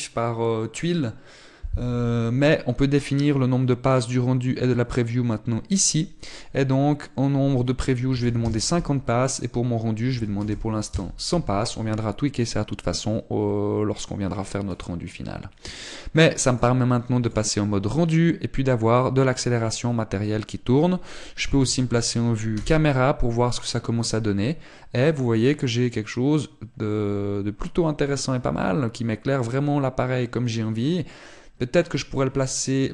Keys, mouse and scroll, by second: 9.3 click, 11.7 click, 15.9-16.8 scroll up 10, 17.3 click, 20.0 middle click, 23.4 KP_0, 24.5-26.5 scroll up 1.